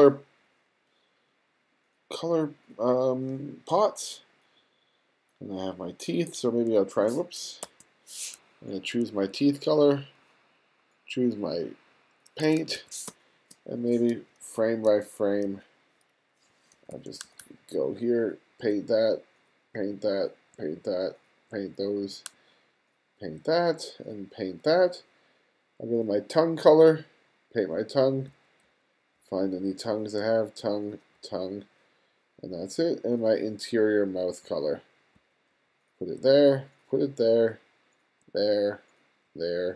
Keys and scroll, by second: 7.3 super+z, 8.7 2, 12.1 2, 12.8 space, 13.8 g, 16.4 [, 17.5 ], 18.4 ], 19.4 ], 20.2 ], 21.2 ], 21.8 ], 23.1 ], 27.4 [, 29.9 [, 30.9 [, 32.1 ], 34.1 [, 34.9 [, 35.2 ], 35.9 ], 37.0 ], 37.9 ], 39.0 ].